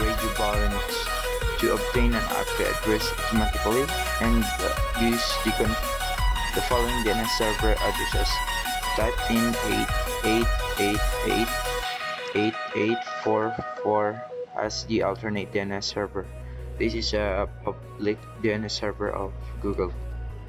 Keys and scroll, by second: 7.6-8.3 typing.